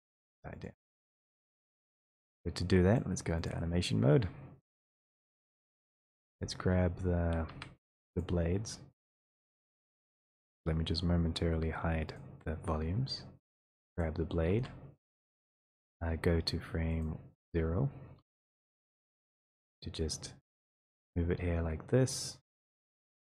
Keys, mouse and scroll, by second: 1.0 click, 3.5 click, 5.3 click, 6.3 click, 7.4-7.8 scroll, 8.2 click, 8.6 middle click, 8.9 middle click, 8.9 middle click, 9.9 right click, 12.2 click, 13.3-13.8 scroll, 14.0 click, 14.6 e, 21.1 click.